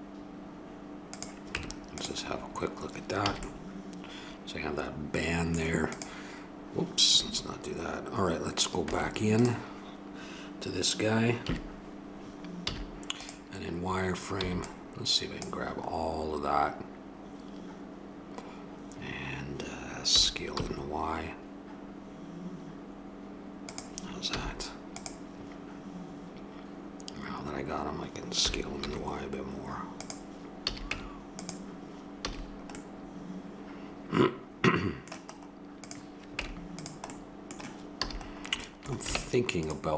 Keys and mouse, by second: 1.5 Tab, 3.3 a, 4.3 middle click, 4.4-4.8 drag, 4.6 middle drag, 4.8 middle click, 5.0 middle click, 6.0 click, 8.8 Tab, 11.4 KP_3, 12.6 z, 14.4 b, 20.1 s, 24.3 z, 26.8 middle click, 28.4 s, 30.6 a, 30.9 Tab, 32.2 a, 34.9 middle click, 35.8-36.3 right drag, 36.3 Tab, 37.1 middle click, 37.9 a, 39.1 ctrl+Tab.